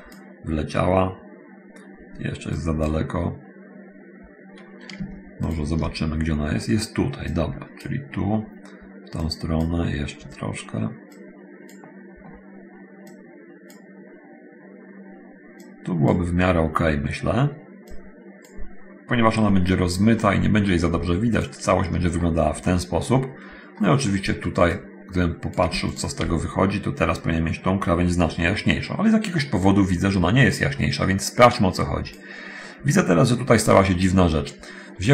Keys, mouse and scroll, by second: 2.8 click, 5.7 ctrl+shift+click, 7.4 click, 9.4 click, 11.4 click, 13.3 click, 15.8 click, 17.8 click, 20.4 middle click, 21.6 ctrl+shift+click, 23.8 middle click, 25.0 click, 26.2 ctrl+shift+click, 30.8-32.5 drag.